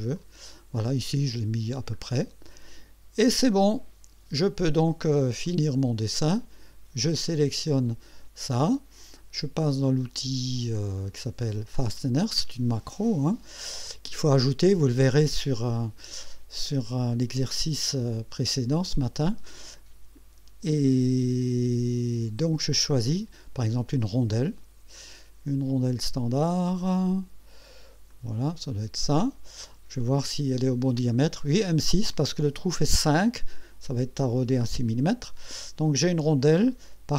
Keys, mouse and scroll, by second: 0.2 click, 0.9-1.7 drag, 2.0-2.8 scroll up 3, 3.2 click, 4.3 scroll up 2, 5.4-6.1 right drag, 7.3 click, 9.6 click, 12.0 click, 28.1 click, 30.0-30.3 scroll down 1, 36.5-37.1 drag.